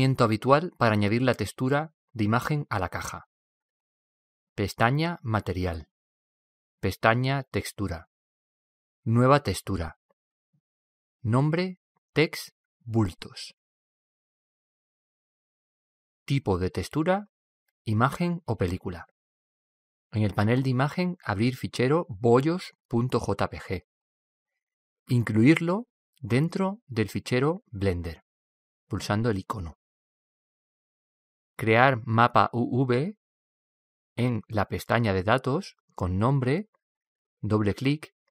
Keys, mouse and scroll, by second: 0.0-1.8 drag, 5.6-7.4 drag, 7.5-9.4 drag, 9.5-12.4 drag, 15.6-17.4 drag, 19.7-21.7 drag, 23.4-25.3 drag, 25.7-27.5 drag, 32.4-36.3 drag, 37.2-38.3 drag.